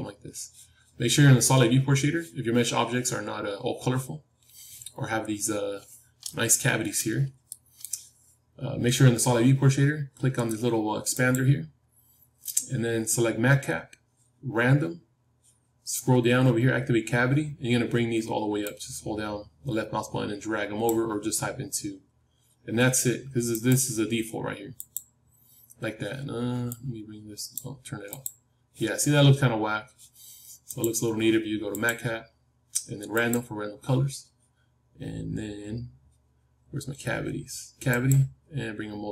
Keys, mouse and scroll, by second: 5.0-5.9 scroll up 1, 5.9 scroll up 1, 6.2-9.6 middle drag, 11.1-13.8 drag, 28.9 scroll up 1, 29.0-30.6 middle drag, 30.6-33.1 drag.